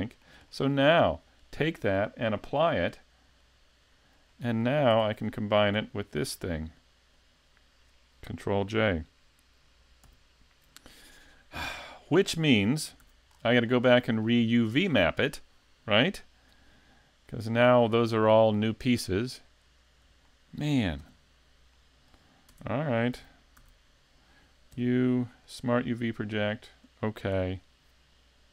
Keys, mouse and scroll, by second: 0.0 middle click, 0.5 shift+middle click, 1.4 right click, 3.4 click, 4.3 shift+middle click, 4.9 a, 5.5 right click, 7.0 shift+right click, 10.0 ctrl+j, 12.3 middle click, 13.0 a, 13.3 scroll down 2, 13.7 middle click, 17.2 right click, 18.5 click, 21.8 middle click, 22.5 Tab, 23.2 a, 23.6 a, 24.8 u.